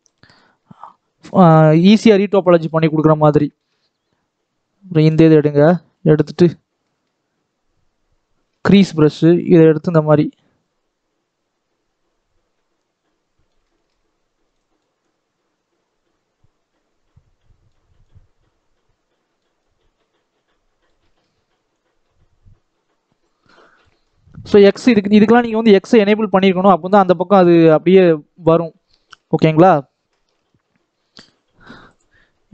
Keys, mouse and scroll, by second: 0.0-0.6 scroll up 2, 0.6 scroll down 2, 0.6 middle click, 1.1 scroll up 1, 1.4 middle click, 2.1-3.6 scroll up 1, 3.6-5.0 shift+middle drag, 5.0 click, 5.2 scroll down 2, 5.4 middle click, 6.2-6.8 scroll up 2, 6.8-8.8 middle drag, 8.8-9.2 scroll up 1, 9.2 scroll down 1, 10.0-13.1 drag, 13.6 shift+middle click, 14.4-20.9 drag, 20.9 shift+middle click, 21.6-23.8 drag, 23.8-24.3 scroll down 5, 24.3 middle click, 24.6-27.2 scroll up 2, 27.2 scroll up 1, 27.2 scroll down 2, 27.3-28.5 middle drag, 28.5 scroll up 2, 28.8 scroll down 1, 29.0 middle click, 29.7-31.2 scroll up 2, 31.2-32.5 shift+middle drag.